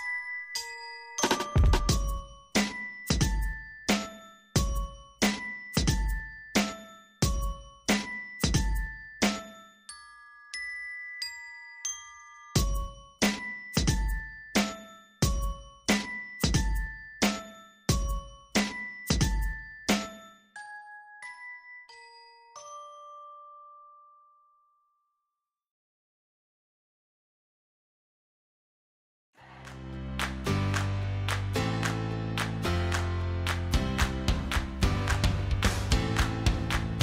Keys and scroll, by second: 4.7 Delete, 15.6 ctrl+j, 27.2 ctrl+j.